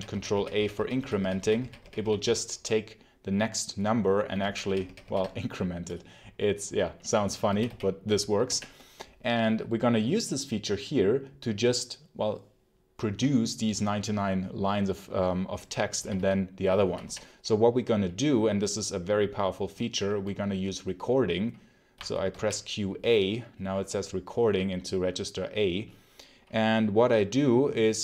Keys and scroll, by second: 0.0 ctrl+a, 0.4 ctrl+^, 0.4 ctrl+a, 1.1 ctrl+a, 1.3 ctrl+a, 1.7 ctrl+a, 2.1 ctrl+a, 4.3 ctrl+a, 7.4 d, 8.3 k, 15.9 k, 16.7 j, 21.8 q, 22.2 a.